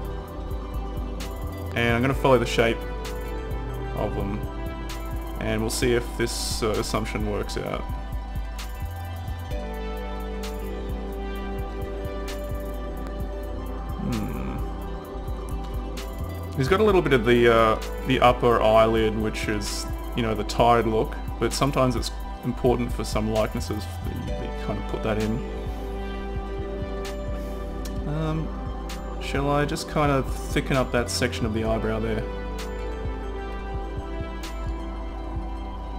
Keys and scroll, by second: 5.1 typing.